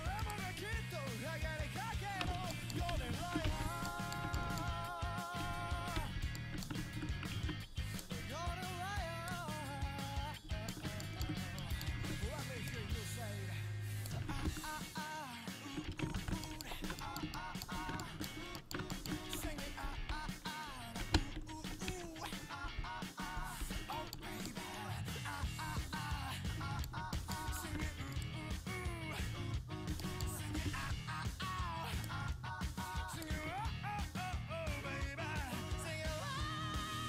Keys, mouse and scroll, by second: 2.6 middle click, 3.0 ctrl+x, 3.2 a, 3.5 ctrl+t, 3.7 a, 5.6 l, 6.0 l, 9.2-11.1 right drag, 10.5-14.0 middle drag, 12.7-15.6 right drag, 15.6 ctrl+x, 16.0 a, 16.2 ctrl+t, 16.4 a, 19.5-21.9 typing, 21.8 click, 22.7 click, 23.3 click, 23.7 click, 25.5 l, 28.2-32.0 drag, 28.2-35.2 right drag, 34.1-36.4 drag.